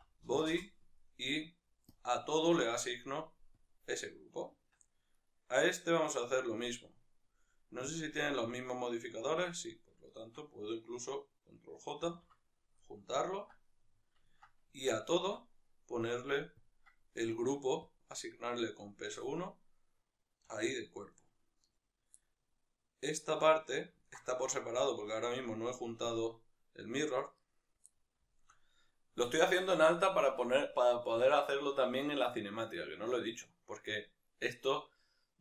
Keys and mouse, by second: 0.5-5.2 drag, 0.6 Return, 4.8 Tab, 5.2-12.2 right drag, 12.2 ctrl+j, 12.9-18.0 middle drag, 14.9 Tab, 18.0-21.1 drag, 20.6 Tab, 21.1-22.2 right drag, 22.2-25.3 middle drag, 25.3 right drag, 27.4-27.9 right drag, 27.9-35.4 middle drag.